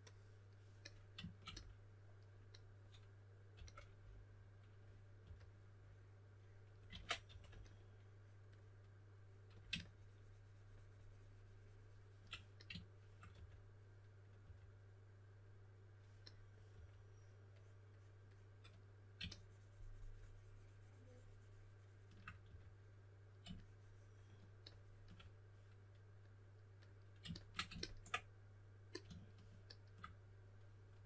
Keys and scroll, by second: 3.5 s, 4.9-5.7 typing, 6.9 super+z, 7.2 3, 13.3 4, 14.3 typing, 16.7 typing, 22.4 4, 30.8-31.0 typing.